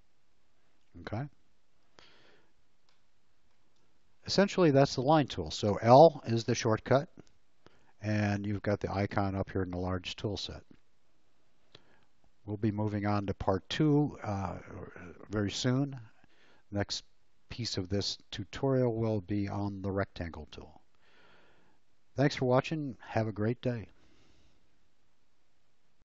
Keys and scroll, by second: 3.6 space.